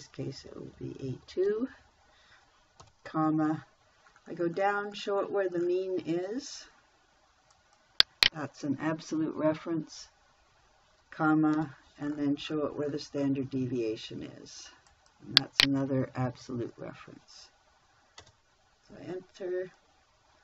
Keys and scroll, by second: 1.2 shift+a, 1.6 2, 3.3 ,, 9.9 F4, 12.0 ,, 16.8 F4, 18.6 Return.